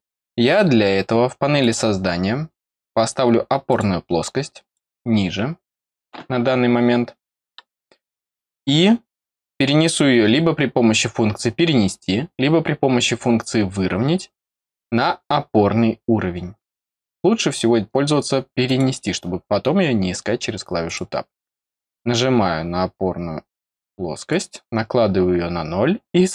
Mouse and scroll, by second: 1.5 click, 3.6 click, 4.6 click, 5.7 click, 8.0 click, 14.0-14.8 scroll down 1, 14.8 scroll down 1, 15.0-18.6 middle drag, 18.6 click, 19.4 middle click, 20.8 click, 21.6-22.0 scroll up 2, 24.2 click.